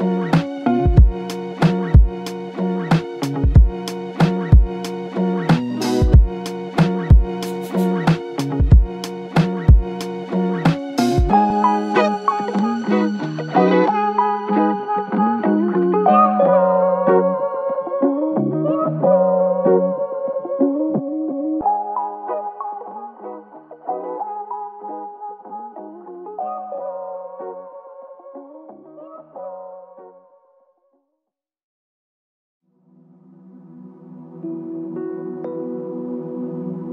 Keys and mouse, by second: 0.4-1.2 typing, 5.6 double click, 23.6 double click, 25.6 double click, 31.1 double click, 33.7 double click.